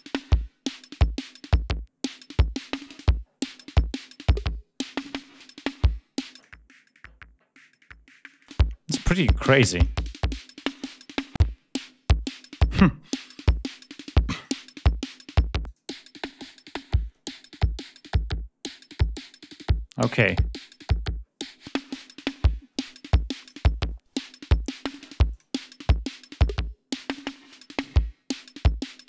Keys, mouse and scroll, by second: 6.2 click, 8.3 click, 9.3 click, 10.5 click, 14.2 click, 15.5 click, 19.0 click, 21.5 click, 23.3 click, 25.1 click.